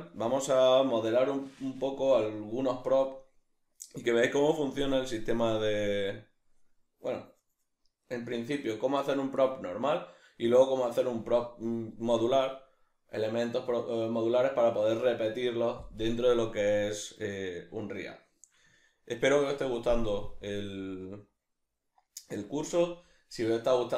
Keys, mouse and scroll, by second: 16.8-23.9 middle drag.